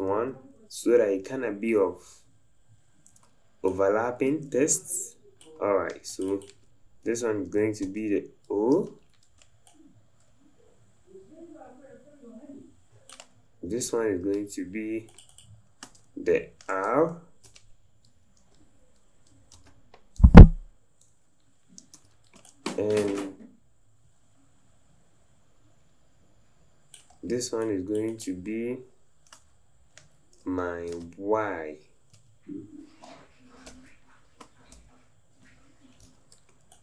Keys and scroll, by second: 0.2 Left, 0.5 Left, 21.9 v, 36.0 v.